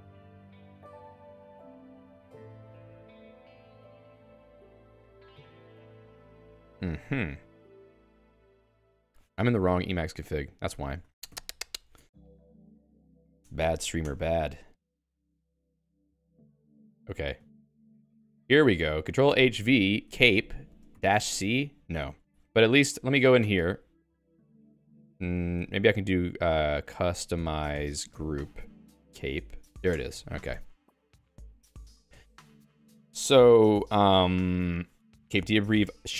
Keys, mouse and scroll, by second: 16.9 Return, 18.0 super+click, 18.7 Escape, 19.9-22.5 typing, 23.0 ctrl+j, 23.6 Return, 25.0 q, 25.6 alt+x, 26.1-30.1 typing, 35.6-36.1 Down.